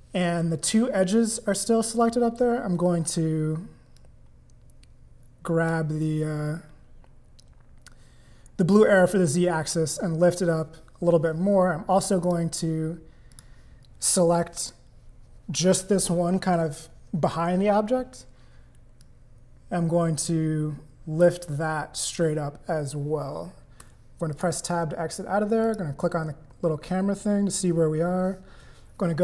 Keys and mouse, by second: 3.9-5.7 drag, 12.2 click, 13.3 click, 19.0-21.2 drag, 23.8 Tab, 24.3 click, 25.6 click, 28.2 click.